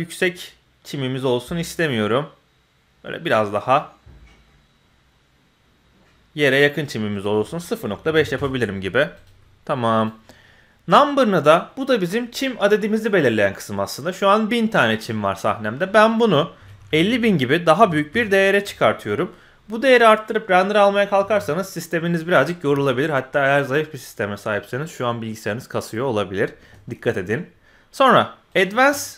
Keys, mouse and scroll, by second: 7.1-8.3 drag, 9.1 click, 10.9-18.3 drag, 16.8 KP_0, 28.7 click.